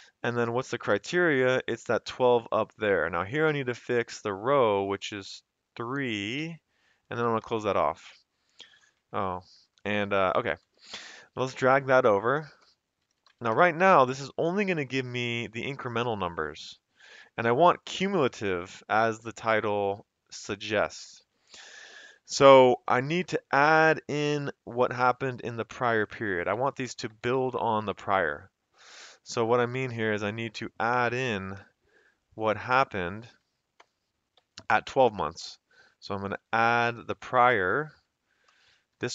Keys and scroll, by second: 1.1 Up, 4.5 F4, 5.3 F4, 7.2 shift+0, 7.4 Return, 8.0 Up, 9.1 Escape, 9.1 f, 10.6 ctrl+c, 11.0 shift+Right, 12.7-13.7 typing, 14.4 Escape, 23.3 F2, 24.0 Escape, 25.8 Left, 26.5 Right, 26.9 Right, 27.1 Right, 27.3 Right, 27.6 Right, 27.9 Right, 29.0 Left, 29.2 Left, 29.4 Left, 29.6 Left, 30.0 F2, 32.0 Left, 32.4 Right, 32.6 F2, 32.9 Left, 33.8 Return, 34.4 Up, 36.8 ctrl+c, 37.1 shift+Right, 38.7-39.1 typing.